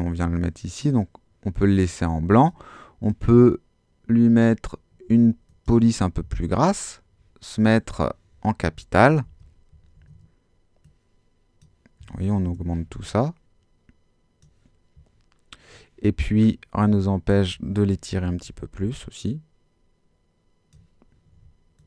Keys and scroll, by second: 9.1 super+t, 10.0 shift+super+t, 12.4 shift+Home, 18.1 super+t.